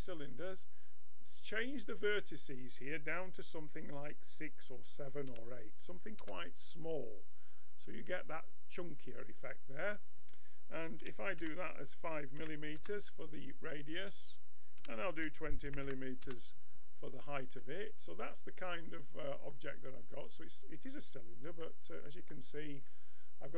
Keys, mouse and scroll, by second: 1.6-7.1 drag, 7.1-10.0 middle drag, 10.0-11.9 drag, 14.0-15.8 drag, 15.8 m, 16.8-19.3 middle drag, 21.6-23.5 middle drag.